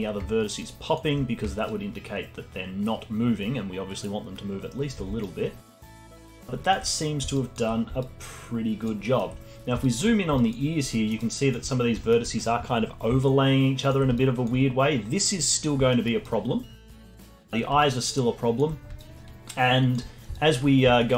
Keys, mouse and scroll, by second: 1.7-4.8 shift+drag, 5.2-6.1 alt+drag, 6.1-6.6 alt+middle drag, 6.6-6.9 alt+drag, 6.9-7.3 scroll up 2, 7.3-9.0 alt+drag, 9.0-9.4 alt+middle drag, 9.4-9.8 scroll up 3, 9.8 alt+click, 10.1-10.4 scroll up 2, 10.4-10.9 alt+drag, 10.9-11.2 alt+middle drag, 11.2-11.7 alt+drag, 11.7 scroll up 1, 12.0-13.2 alt+middle drag, 13.2-15.5 alt+drag, 15.5-15.9 scroll down 5, 15.9-16.2 alt+middle drag, 16.2-20.1 alt+drag, 20.1 scroll down 1, 20.3-21.0 alt+drag, 21.0 alt+middle drag.